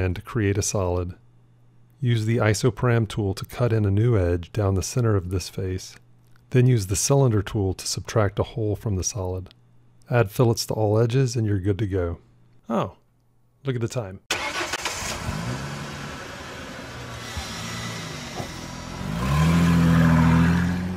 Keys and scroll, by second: 3.0 ctrl+r.